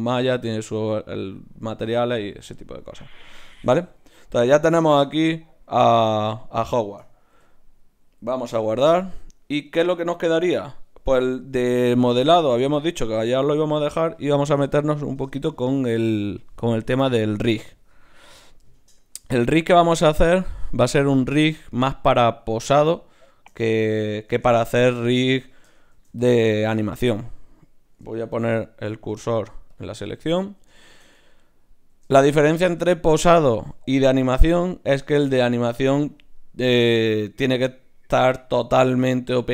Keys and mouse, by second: 3.9-8.5 middle drag, 7.3 KP_1, 8.5 ctrl+s, 25.9 shift+c, 28.4 shift+s.